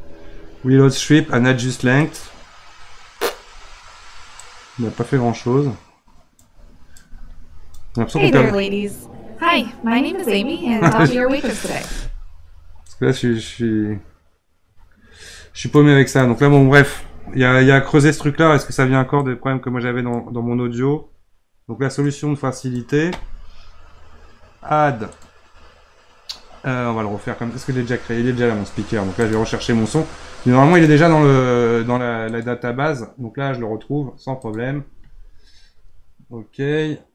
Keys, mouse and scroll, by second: 4.4-7.9 drag, 7.9 space, 11.9 space, 12.9-15.9 drag, 16.1 click, 17.5 Delete, 19.2-25.0 drag, 25.1-35.3 drag.